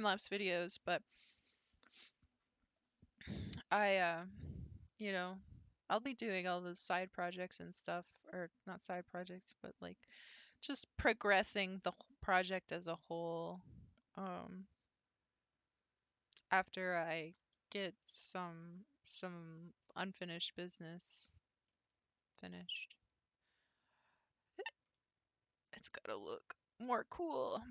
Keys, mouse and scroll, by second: 18.0-19.4 middle drag, 19.4-19.8 scroll up 3, 19.8-21.1 shift+middle drag, 21.1-21.7 scroll down 4, 21.7-24.4 middle drag, 24.4 scroll up 2, 24.9-26.5 middle drag, 26.5 click.